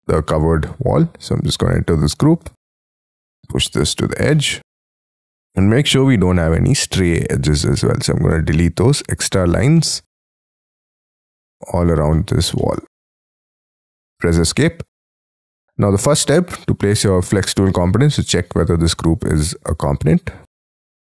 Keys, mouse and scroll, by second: 1.3 double click, 2.4 p, 4.3 middle click, 5.7 e, 6.0-6.6 scroll up 4, 7.6 middle click, 8.3 shift+middle click, 9.4 middle click, 9.7 middle click, 10.2 middle click, 10.6 middle click, 11.0-11.4 scroll up 10, 12.1 middle click, 12.4 scroll up 1, 12.6-13.9 scroll down 19, 13.0 space, 14.2 Escape, 14.8 scroll down 6, 15.2 middle click, 19.3 scroll up 6, 20.9 right click.